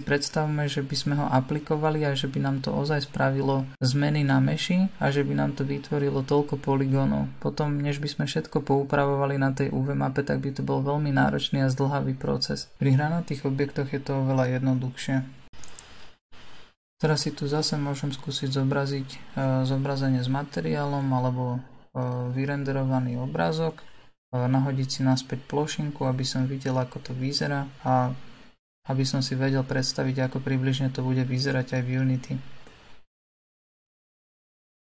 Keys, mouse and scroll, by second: 7.1 click, 8.0 click, 9.2-12.8 middle drag, 12.8-14.9 scroll up 2, 15.8-17.1 middle drag, 17.1-17.6 scroll down 2, 17.6-19.8 middle drag, 19.8 click, 21.8 KP_6, 22.4 KP_6, 24.2-27.1 right drag, 27.1-33.0 middle drag, 33.0 click.